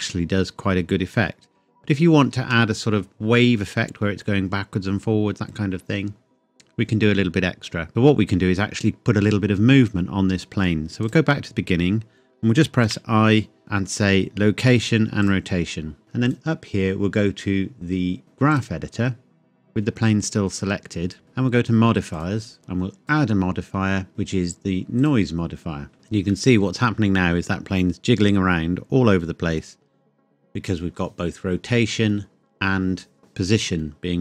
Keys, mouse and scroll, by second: 2.3 space, 7.9-9.1 scroll down 1, 11.0 click, 12.9 i, 15.2 click, 16.3 click, 18.5 click, 22.1 click, 23.0 click, 25.0 click, 25.9 space, 26.3 middle click.